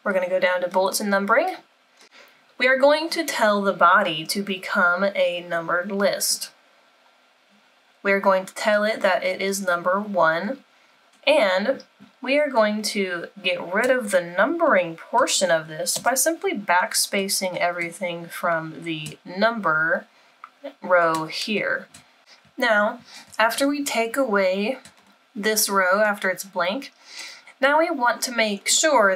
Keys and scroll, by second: 15.9 BackSpace.